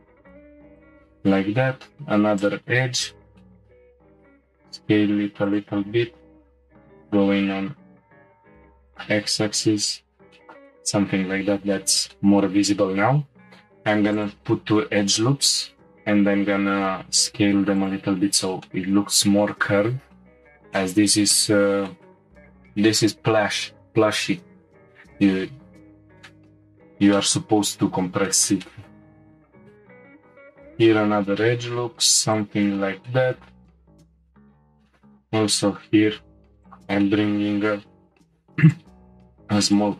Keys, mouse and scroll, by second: 1.6 ctrl+r, 3.4 shift+middle click, 4.1 s, 6.3 g, 9.4 Tab, 9.8-10.3 scroll down 1, 10.3-11.2 shift+middle drag, 11.2 Tab, 11.8-12.1 scroll up 1, 12.1 shift+middle click, 12.9-13.4 scroll down 1, 13.4 ctrl+r, 15.6 s, 18.2 scroll down 1, 18.3 Tab, 18.7-25.0 middle drag, 25.6-26.3 scroll up 2, 26.3-26.6 shift+middle drag, 26.6 Tab, 27.1 shift+middle click, 27.8-28.3 scroll up 1, 28.3 shift+middle click, 29.1-29.8 scroll up 2, 29.8 ctrl+r, 30.2 s, 32.7-34.2 shift+middle drag, 34.2 ctrl+r, 34.7 g, 37.0-38.3 shift+middle drag, 38.3 ctrl+r.